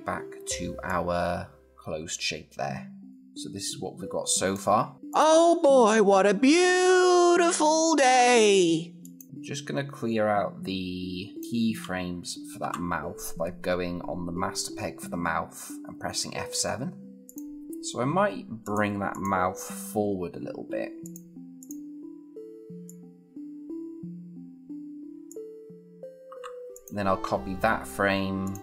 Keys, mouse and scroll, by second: 3.1-4.3 click, 8.8-11.4 click, 12.4 F7, 17.1 click, 18.8 click, 20.8 click, 24.4 typing, 25.1-26.3 click, 26.3 F6, 26.5 click.